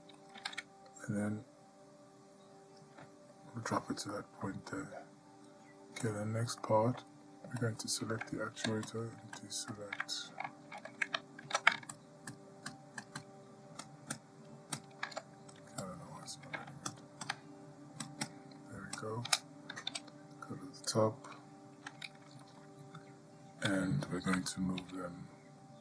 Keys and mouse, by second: 0.6 g, 4.3-4.7 shift+middle drag, 6.8-7.4 ctrl+middle drag, 7.8-8.6 drag, 10.4 click, 11.7 ctrl+z, 13.2 ctrl+click, 16.2-16.7 drag, 17.1 shift+click, 18.5 shift+click, 20.1 KP_7, 25.0 g.